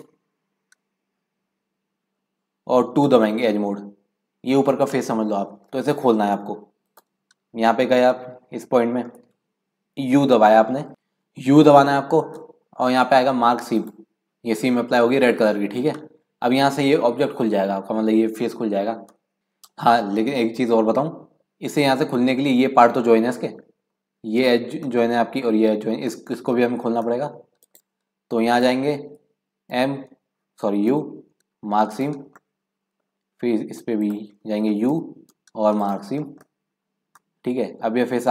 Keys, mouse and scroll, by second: 0.0 KP_Decimal, 0.7-1.1 scroll down 1, 3.0 2, 6.9 click, 8.2-10.2 middle drag, 10.2 u, 11.6 u, 19.4 scroll up 2, 23.5-26.8 middle drag, 26.8-27.1 scroll down 1, 27.1-28.5 middle drag, 28.5 click, 29.7 m, 30.9 u, 32.4-34.0 middle drag, 34.0 click, 34.9 u, 36.2-36.6 scroll down 3, 36.6 middle click, 36.8-37.2 scroll up 1, 37.2-38.3 middle drag.